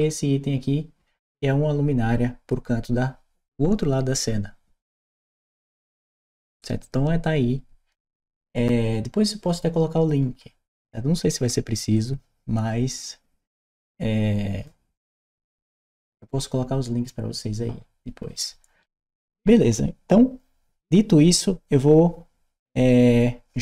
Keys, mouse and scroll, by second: 11.8-14.9 drag.